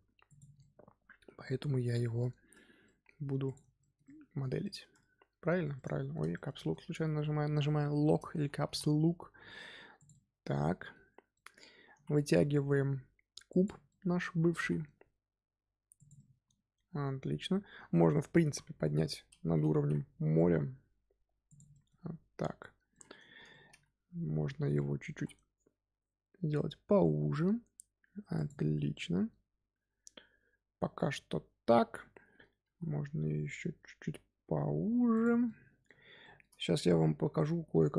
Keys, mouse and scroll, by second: 0.5-1.6 middle drag, 1.6-2.3 scroll down 2, 2.3-2.8 scroll down 1, 2.8 middle click, 3.4 click, 3.7 middle click, 4.6 middle click, 5.7-6.9 middle drag, 6.9-7.3 scroll down 2, 8.3 a, 8.5 s, 10.0-11.8 middle drag, 11.8 s, 13.8 middle click, 14.5 s, 16.1-18.4 middle drag, 18.4 KP_1, 19.0-19.4 scroll up 2, 19.7 g, 21.7 middle click, 22.0 scroll down 1, 22.8 middle click, 23.7-24.1 scroll up 2, 24.2 s, 28.9-32.6 middle drag, 32.6 s, 35.4-37.9 middle drag.